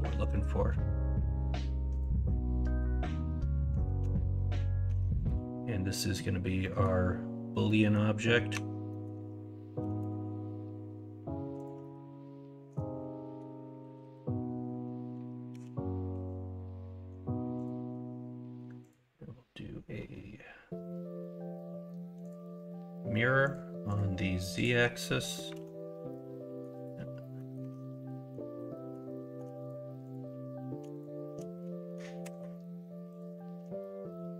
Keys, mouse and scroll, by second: 4.8 Tab, 6.6 middle click, 7.6 middle drag, 8.5 Tab, 8.8 middle click, 9.7 s, 11.8 middle click, 11.8 scroll up 1, 13.7 KP_1, 13.9 KP_3, 15.5 g, 25.2 middle click, 25.5 alt+z, 25.5 alt+s, 27.3 middle click, 27.6 Tab, 28.1 middle drag, 28.7 middle drag, 32.2 ctrl+KP_Subtract, 33.5-34.3 middle drag.